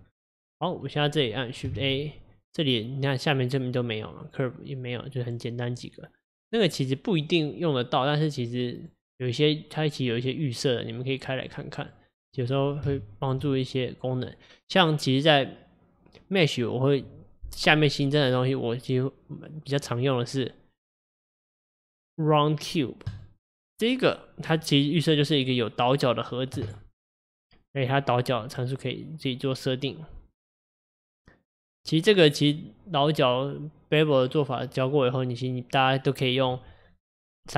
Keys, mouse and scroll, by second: 1.6 click, 1.8 shift+a, 8.8-11.9 drag, 12.6 click, 13.0 shift+a, 24.7-25.4 scroll down 3, 28.5-31.5 drag.